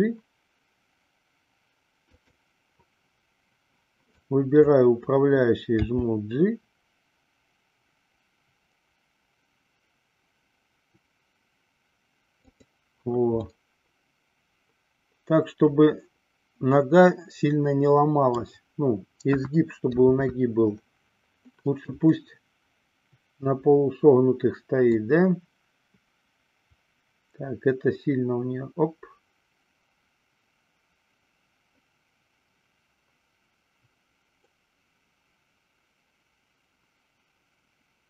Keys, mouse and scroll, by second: 0.2 g, 2.4 click, 4.3 click, 5.9 g, 13.7-18.7 middle drag, 19.4 KP_1, 20.2 KP_3, 20.4 KP_3, 25.0-38.0 drag.